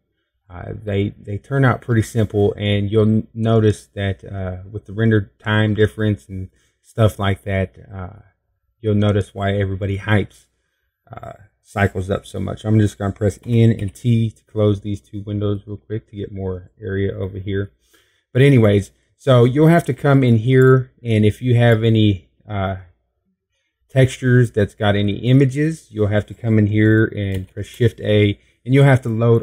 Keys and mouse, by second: 0.2 middle click, 1.7 middle click, 4.1-5.2 middle drag, 13.4 n, 13.7 t, 14.4 click.